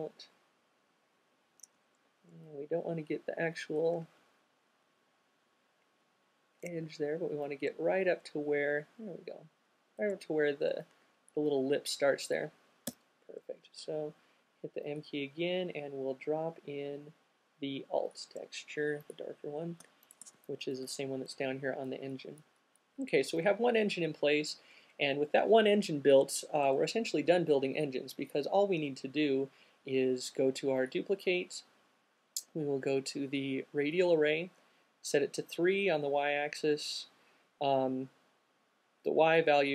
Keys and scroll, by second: 0.0 shift+Up, 0.5 shift+fn+Up, 4.7 shift+fn+Up, 5.0 shift+fn+Up, 5.2 shift+fn+Up, 12.6 alt+m, 19.8 alt+q, 23.4 0.